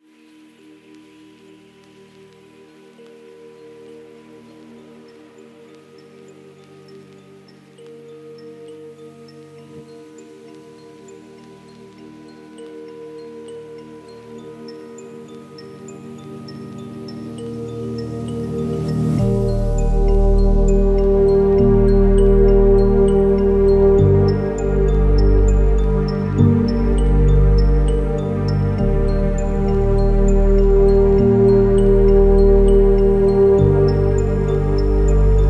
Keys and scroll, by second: 34.1 ctrl++, 34.2 ctrl++, 34.7 ctrl+-.